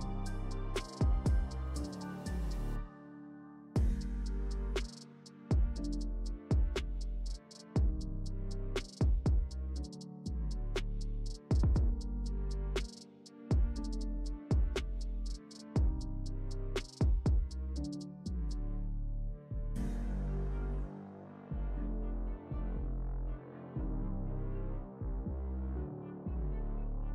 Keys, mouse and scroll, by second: 7.1 click, 8.3-11.0 typing, 11.4 ctrl+Return, 13.0 click, 17.1 click, 17.8 ctrl+space, 18.1-18.5 ctrl+click, 18.1 ctrl+space, 18.9-19.4 click, 19.9 ctrl+z, 20.4-21.5 drag, 22.2-23.1 shift+drag.